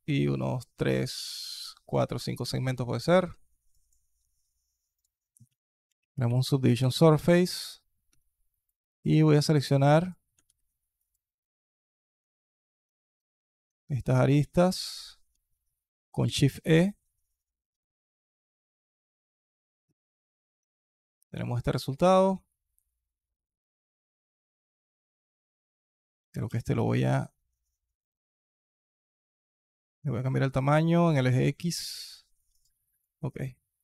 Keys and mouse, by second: 2.0 alt+click, 2.3-2.9 alt+drag, 3.1 alt+drag, 3.5 alt+click, 4.9-6.6 drag, 7.9 Tab, 8.3 alt+click, 8.6 KP_2, 8.8 click, 10.4 alt+click, 12.9 alt+click, 13.5 alt+click, 14.7 alt+shift+click, 16.1 shift+e, 19.9 alt+click, 20.4 Tab, 20.7 alt+click, 21.1 alt+click, 21.6 alt+click, 22.3-24.3 alt+drag, 24.9-25.4 alt+drag, 26.1 s, 31.8-32.3 alt+drag, 32.4 drag, 32.7 alt+click, 33.6 alt+click.